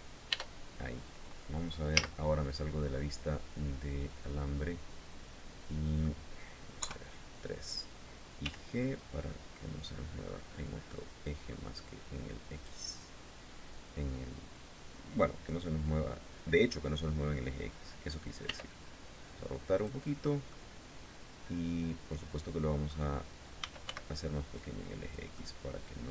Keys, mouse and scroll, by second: 0.3-0.6 scroll down 2, 1.5 z, 2.0-5.8 drag, 6.3 KP_3, 8.0 g, 12.2 click, 18.0 r, 19.3 click, 19.8 scroll down 1, 20.0-22.6 drag, 22.9-23.9 typing, 24.6 click, 24.9-26.1 drag.